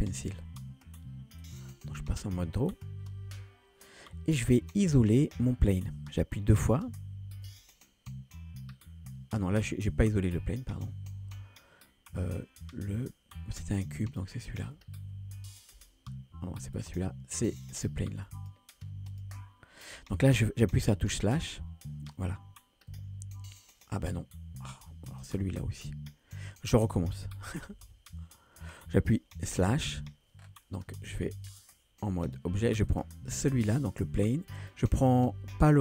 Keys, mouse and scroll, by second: 1.4-3.0 drag, 14.0 shift+click, 18.4-18.9 drag, 19.1 ctrl+click, 21.6 KP_Divide, 22.9 KP_1, 25.1 shift+click, 27.7 a, 27.9 a, 29.6 KP_Divide, 30.4-30.7 scroll down 2, 31.6-32.4 drag, 32.9 click, 34.6 shift+click.